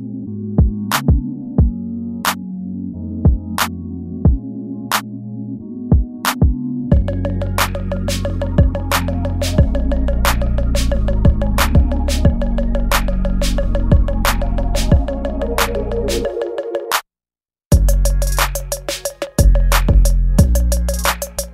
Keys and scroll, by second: 1.7 space, 2.5 space, 3.9 space, 4.4 space, 5.1 ctrl+z, 10.4 ctrl+z, 10.4 space, 12.1 space, 12.8 space, 14.1 ctrl+z, 15.4 ctrl+z, 16.2 space, 16.8 space, 16.9 ctrl+z, 21.0 space.